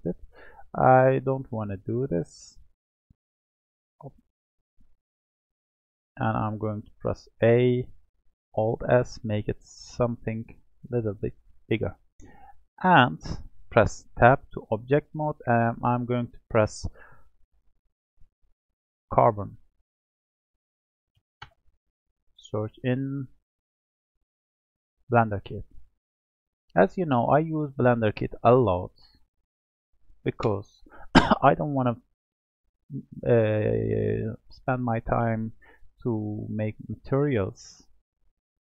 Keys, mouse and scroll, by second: 0.6 ctrl+z, 0.9 ctrl+z, 1.2 ctrl+z, 1.5 ctrl+z, 1.8 ctrl+z, 2.2 ctrl+z, 2.6 ctrl+z, 3.1 ctrl+z, 5.4 click, 7.1 a, 8.6 alt+s, 11.2 alt+s, 11.2 alt+s, 14.2 Tab, 15.5-18.7 drag, 25.9-32.6 drag, 36.5-38.6 drag.